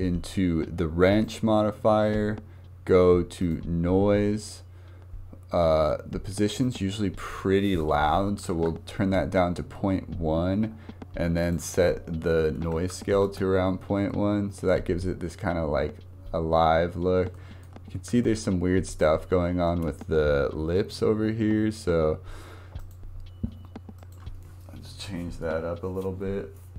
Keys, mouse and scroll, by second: 1.1-5.7 drag, 6.6-13.4 drag, 13.4 space, 17.3 shift+middle click, 17.8-18.3 scroll up 3, 18.3-19.7 shift+middle drag, 19.7 space, 22.8 click, 24.0 click.